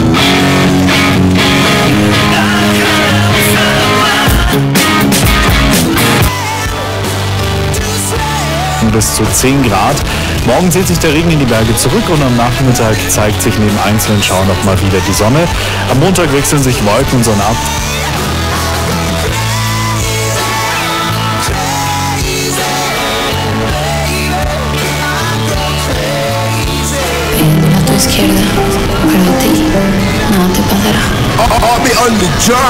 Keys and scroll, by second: 6.2 Page_Down, 17.7 Page_Down.